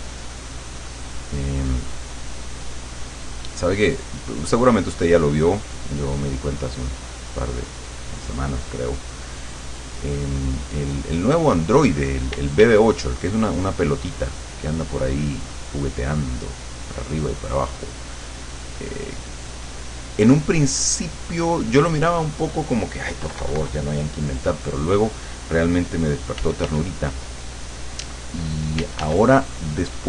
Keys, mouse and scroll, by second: 0.5-12.3 drag, 12.4 d, 13.2-14.9 drag, 15.1-22.1 drag, 23.3 KP_Subtract, 26.4 f, 27.7-28.9 drag, 28.8 f, 29.1-30.0 drag.